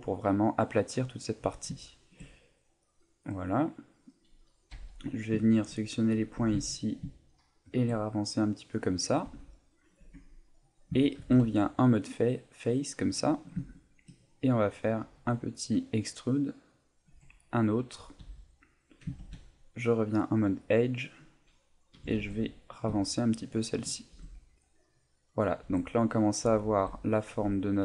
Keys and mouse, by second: 0.3 middle click, 1.8 middle click, 2.3 shift+middle click, 3.1 middle click, 4.7 a, 5.1 right click, 5.5 shift+right click, 6.3 g, 7.8 shift+click, 8.0 middle click, 9.3 Tab, 9.5 middle click, 10.0 Tab, 10.4 middle click, 11.2 ctrl+Tab, 13.0 right click, 13.3 middle click, 13.7 shift+middle click, 14.2 middle click, 16.9 click, 17.0 e, 17.8 click, 18.2 a, 19.2 ctrl+Tab, 20.9 right click, 21.9 g, 23.6 shift+click, 24.1 Tab, 24.3 middle click, 25.6 Tab, 25.8 middle click, 26.4 Tab, 27.0 right click.